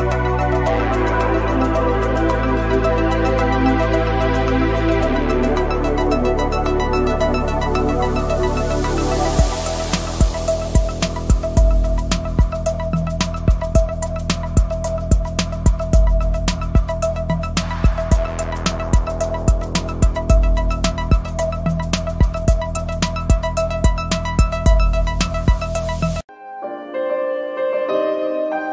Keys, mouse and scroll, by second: 3.1 click, 7.9 space, 8.5 click, 9.2 ctrl+i, 9.6 ], 10.0 click, 10.7 x, 10.8 click, 12.0 space, 12.2 click, 14.0 scroll down 1, 14.1 click, 14.5 scroll down 1, 15.1 scroll down 1, 15.8 click, 19.0 click, 23.3 click, 24.3 Down, 24.7 click, 25.2 click, 25.9 Down, 26.9 click, 27.4 click, 27.7 space.